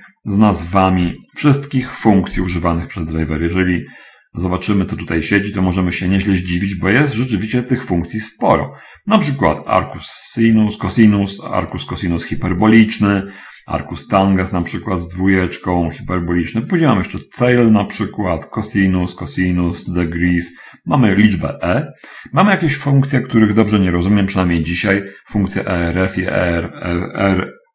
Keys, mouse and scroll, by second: 1.5 Tab, 4.2 middle click, 5.8 middle click, 7.0 middle click, 10.1 click, 11.9 click, 13.1 click, 14.3 click, 14.9-15.8 scroll up 1, 17.7 click, 18.6 scroll down 2, 19.5 click, 20.3 click, 21.0 click, 22.4 scroll up 1, 25.5 click.